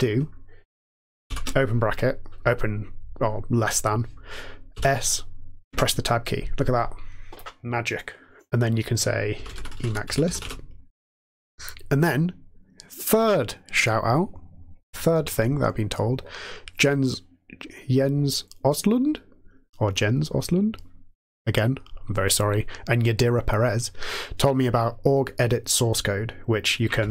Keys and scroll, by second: 1.3 typing, 4.7 typing, 5.6 Tab, 9.0-10.8 typing, 12.5 typing, 27.0 alt+x.